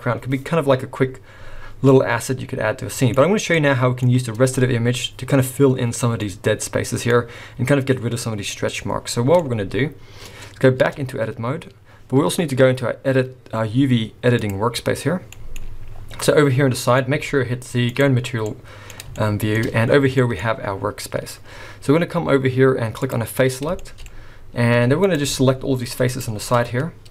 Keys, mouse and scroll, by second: 1.8 scroll up 1, 1.9 middle click, 3.5 middle click, 6.2 middle click, 7.1 scroll up 5, 8.4-9.3 scroll down 1, 9.3 scroll down 2, 9.4 middle click, 10.8 Tab.